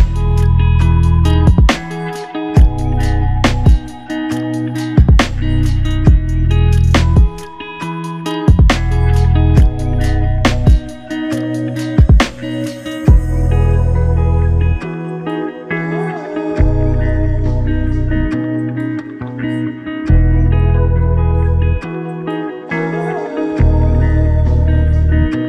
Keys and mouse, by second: 2.0 alt+click, 4.0 alt+click, 5.3 alt+click, 11.2 shift+click, 17.0 s, 17.2 s, 19.8 double click, 24.3 shift+click.